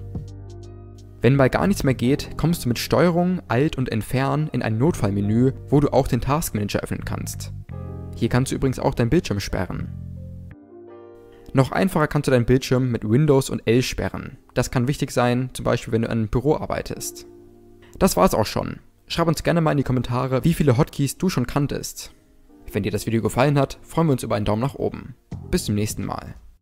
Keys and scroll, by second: 1.5 ctrl+alt+Delete, 12.2 super+l.